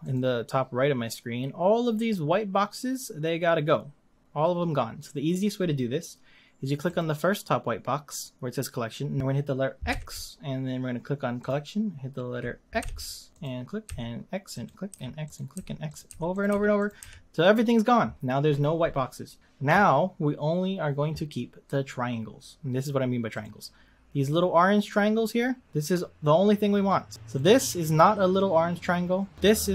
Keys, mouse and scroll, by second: 0.0 click, 6.8 click, 9.9 x, 11.4 click, 12.8 x, 13.3 click, 13.8 x, 14.5 click, 14.9-17.0 typing, 15.2 click, 15.9 click, 16.3 click, 16.8 click, 23.3 click, 27.3 click, 29.4 click.